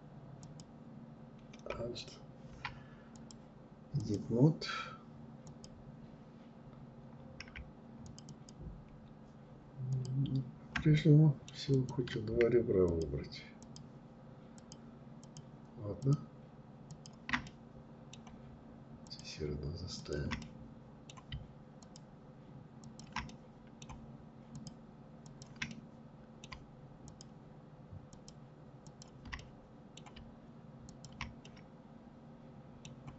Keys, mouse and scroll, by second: 2.2-4.7 drag, 7.1 shift+click, 7.3 shift+click, 8.9 shift+click, 10.0 middle click, 10.8 click, 11.9 shift+click, 12.6 shift+click, 13.6 shift+click, 14.2 shift+click, 15.0 shift+click, 15.9 shift+click, 16.5-18.1 middle drag, 18.1 shift+click, 19.0 shift+click, 19.4-20.9 middle drag, 20.9 shift+click, 21.9 shift+click, 22.3-23.6 middle drag, 23.6 shift+click, 24.3 shift+click, 24.7-26.1 middle drag, 26.1 shift+click, 27.2 shift+click, 27.9 shift+click, 28.4-29.9 middle drag, 29.9 shift+click, 30.5-33.1 middle drag.